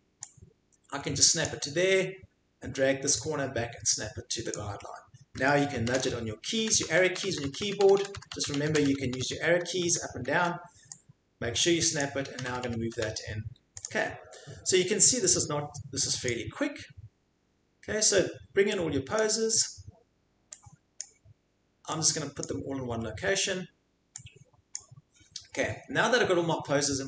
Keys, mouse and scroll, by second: 1.4 click, 4.5 click, 5.7 Left, 5.9 Left, 6.1 Left, 6.6 Left, 6.7 Left, 6.8 Right, 7.1 Right, 7.2 Left, 7.3-8.9 drag, 7.4 Left, 7.6 Left, 7.8 Left, 7.9 Left, 8.2 Left, 8.3 Left, 8.5 Left, 8.7 Left, 9.0 Right, 9.2 Right, 9.2 click, 9.8-10.2 scroll, 10.3 Left, 12.3 Left, 12.3-12.9 drag, 12.3 scroll, 12.5 Left, 12.7 Left, 12.9 Right, 13.8 click, 16.2 click, 19.2 click, 20.0 scroll down 1, 21.0 click, 22.4 click, 24.8 click.